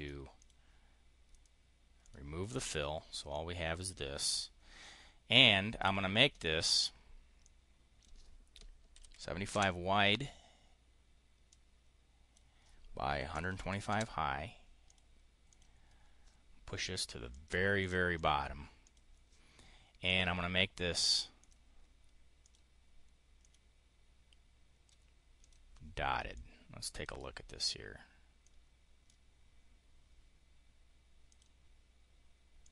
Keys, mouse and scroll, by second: 0.1 click, 1.2 click, 1.9 click, 2.3 click, 3.2 click, 5.2 click, 5.7 click, 7.3 click, 8.5-9.4 typing, 11.3 click, 12.9-14.0 typing, 14.7 click, 15.3 click, 17.2 click, 17.7 click, 18.0 click, 18.7 click, 21.3 click, 22.3 click, 23.3 click, 25.3 click, 26.2 click, 28.3 click, 31.1 click, 32.5 click.